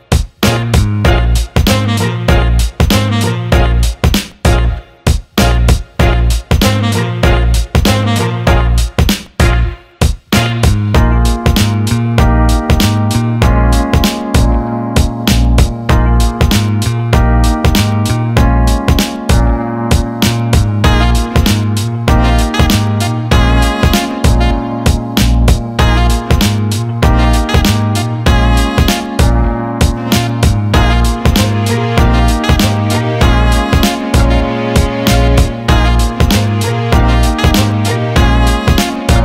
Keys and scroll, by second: 7.0 Caps_Lock, 12.9 Return, 29.7 Escape, 34.0 Return.